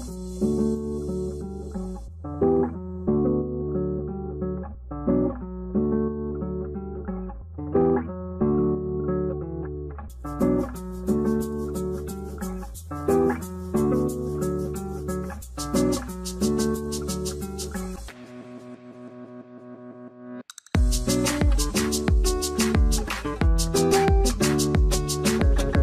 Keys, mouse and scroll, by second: 22.5 4, 23.4 1, 25.3 double click.